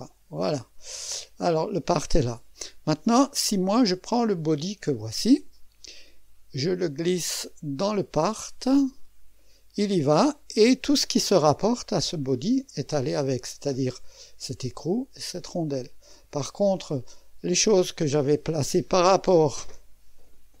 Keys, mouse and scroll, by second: 0.0-1.1 drag, 1.7-4.2 scroll down 2, 4.4-11.3 drag, 11.3 middle click, 12.1-13.1 drag, 13.9-15.1 drag, 15.2 click, 16.2 middle click, 17.0-20.6 drag.